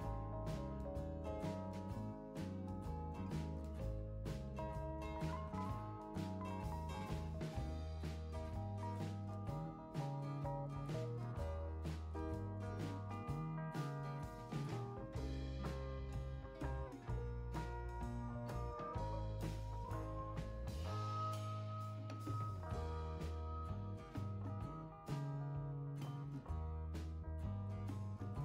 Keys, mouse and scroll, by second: 1.4 click, 3.3 click, 7.9 click, 8.8 5, 9.3 0, 9.7 Return, 12.1 click, 13.2 4, 13.5 5, 16.4 click, 17.6 6, 18.6 Return, 22.5 click, 24.0 2, 24.3 5, 24.9 Return.